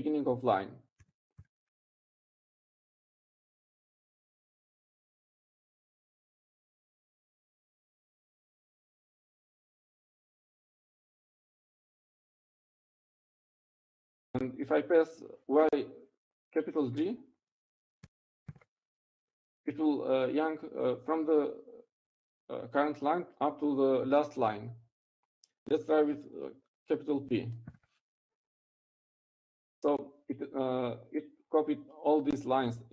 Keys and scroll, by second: 3.7-4.6 typing, 5.5 Down, 6.6-7.0 Right, 7.6 Right, 8.1 p, 11.0 u, 20.6 y, 21.1 shift+g, 30.1 shift+p.